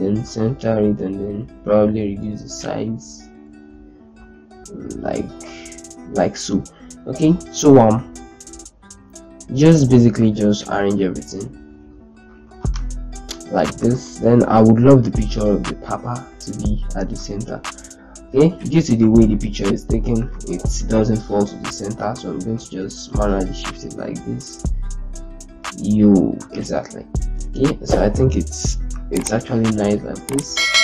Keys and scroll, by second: 7.4 shift+Down, 8.1 shift+Down, 8.9 shift+Down, 9.6 shift+Down, 13.8 ctrl+space, 15.0 shift+c, 15.9 shift+z, 20.1 ctrl+space.